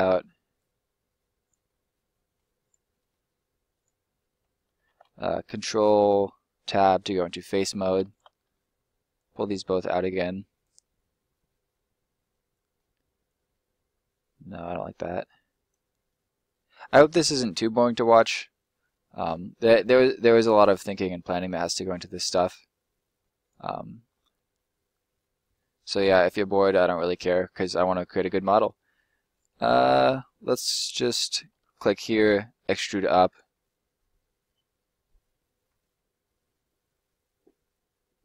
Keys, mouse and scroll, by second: 0.5 click, 1.6 middle click, 2.6 right click, 2.9 middle click, 3.7 right click, 4.7 ctrl+right click, 6.6 click, 6.9 right click, 7.5 middle click, 8.0 shift+right click, 8.3 middle click, 9.1 click, 10.7 middle click, 13.2 click, 15.8 middle click, 15.9-16.9 scroll down 1, 16.9 right click, 17.2 middle click, 19.6-22.0 scroll down 1, 22.0 middle click, 23.3 right click, 23.6 middle click, 24.0 scroll up 1, 24.3 middle click, 29.0 scroll down 1, 29.1 middle click, 30.5 right click, 31.5 middle click, 32.2 e, 33.2 click, 33.5 middle click, 34.8-36.1 scroll down 1.